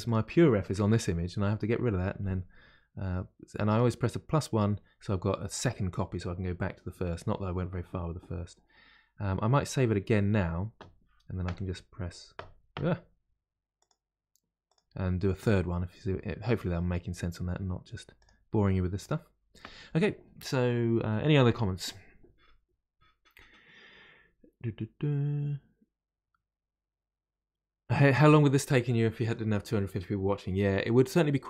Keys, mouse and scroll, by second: 13.7-16.9 drag.